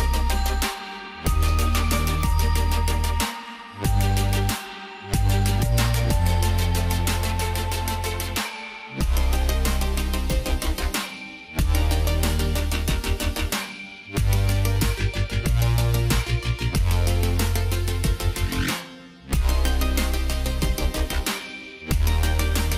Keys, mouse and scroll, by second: 7.8 t, 8.2 click, 9.4 Caps_Lock, 10.4-11.1 typing, 13.1 click, 19.7 click.